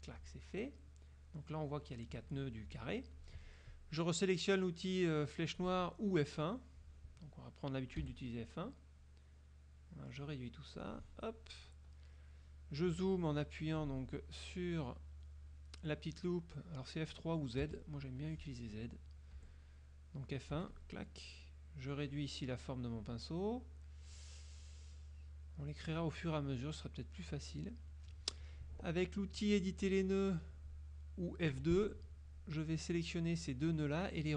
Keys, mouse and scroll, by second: 8.1 F1, 9.1-10.4 drag, 10.8 click, 17.7 z, 18.3 click, 19.4 F1, 20.7 F1, 20.8 click, 22.0-23.3 drag, 23.8 click, 24.8 click, 25.8 click, 26.6-27.3 drag, 31.6 F2, 33.0 click.